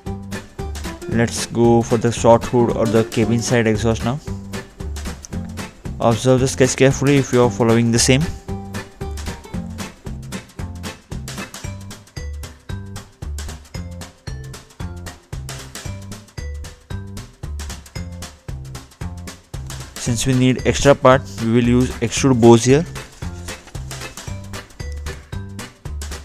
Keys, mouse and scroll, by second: 0.4 scroll down 2, 2.1 click, 4.6 middle click, 6.5 ctrl+8, 7.6 scroll up 1, 7.7-8.3 scroll down 2, 9.0 click, 9.4-10.0 scroll down 2, 10.0 scroll down 1, 11.7 scroll down 1, 12.1 scroll up 2, 12.7 scroll down 2, 13.1-14.3 scroll up 2, 15.0 click, 15.7 click, 16.1-17.5 scroll up 2, 17.5 click, 19.9-20.4 scroll down 2, 21.4 middle click, 23.1 scroll up 2, 24.1-24.5 scroll down 2, 25.2 scroll up 2.